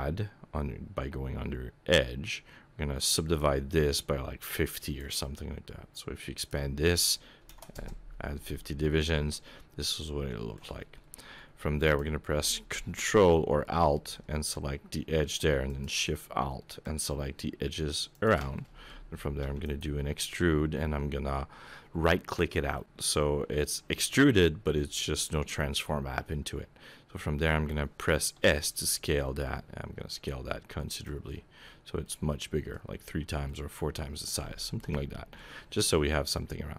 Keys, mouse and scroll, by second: 4.8 click, 6.3 click, 9.3 middle click, 11.8 alt+click, 15.7 alt+shift+click, 16.8 alt+shift+click, 18.1 alt+shift+click, 18.5 middle click, 19.4 e, 20.1-21.1 scroll down 3, 28.3 s, 31.3-32.0 scroll down 10, 32.0 middle click, 33.0-33.7 scroll up 7, 33.5 middle click, 34.5 shift+middle click, 34.9 middle click.